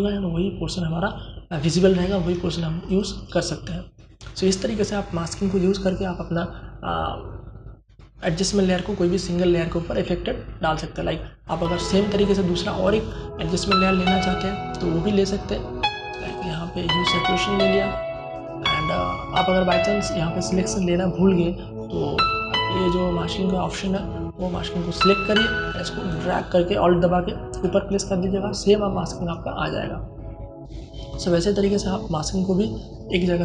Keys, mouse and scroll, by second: 2.2 alt+click, 14.6 click, 23.1 alt+click, 25.4-33.4 alt+drag.